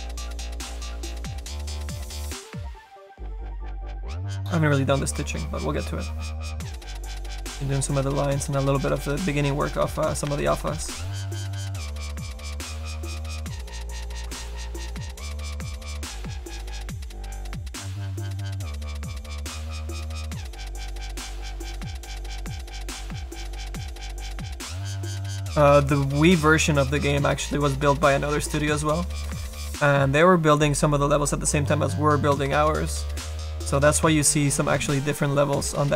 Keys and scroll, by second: 10.5 ctrl+z, 10.7 ctrl+z.